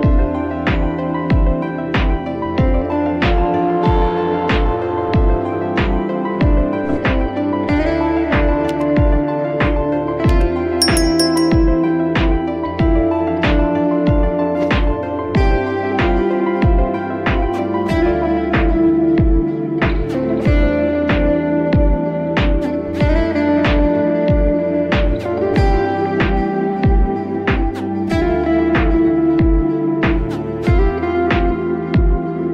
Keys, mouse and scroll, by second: 2.3-2.7 scroll down 3, 2.9 click, 3.9 a, 5.0 r, 11.7 r, 15.9 s, 18.6 g, 21.9 Tab, 22.8 click, 24.6-29.2 drag, 31.5 click, 31.8 Tab.